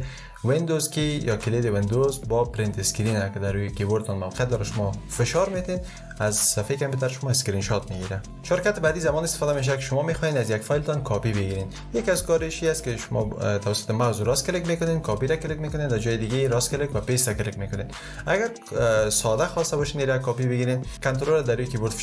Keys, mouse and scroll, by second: 0.5 super+Print.